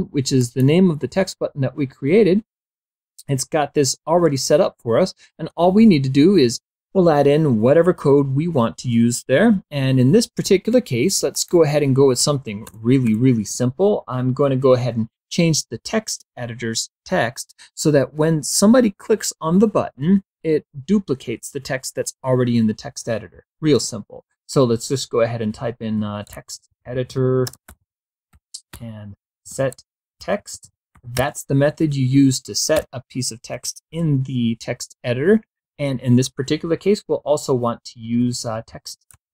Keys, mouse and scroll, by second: 0.5 click, 7.4-10.8 drag, 11.6 Return, 24.6-31.3 typing, 32.4 ;, 33.2 KP_4, 37.6-39.3 typing.